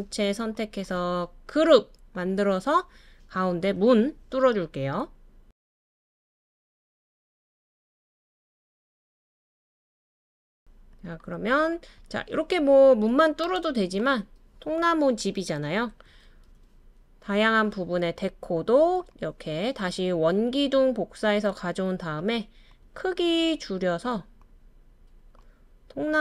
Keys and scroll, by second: 16.2 super+c, 16.4 super+v.